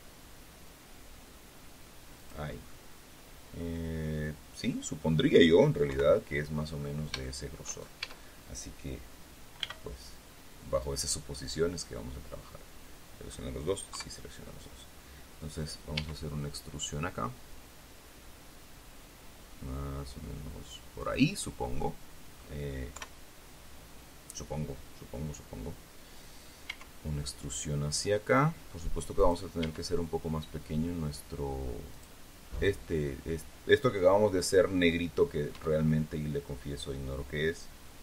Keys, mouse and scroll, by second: 2.1 click, 2.6-5.3 middle drag, 5.8 KP_3, 6.6-7.0 scroll up 2, 7.1 shift+middle click, 7.9 shift+a, 9.5 b, 10.7 click, 12.0-13.4 middle drag, 13.8 KP_3, 15.8 e, 20.9 click, 21.7 middle click, 22.8 KP_3, 26.6 e, 29.1 click, 29.5 e, 31.8 click, 35.4 e.